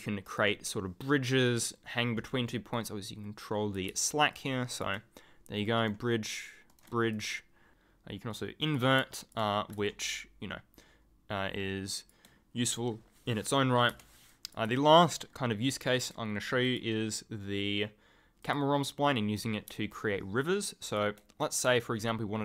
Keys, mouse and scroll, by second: 0.2 right click, 2.7 click, 4.3 ctrl+click, 4.4-5.4 ctrl+scroll up 1, 5.8 right click, 7.1 ctrl+click, 8.6 click, 9.1 ctrl+click, 13.9 Delete, 14.3 click, 15.1 ctrl+click, 15.2-15.6 ctrl+scroll up 1, 18.4 click, 19.7 ctrl+click, 19.9 ctrl+scroll down 1, 20.1-20.9 ctrl+scroll, 21.7 ctrl+click, 21.9 ctrl+scroll up 1, 22.3-22.4 ctrl+scroll down 1.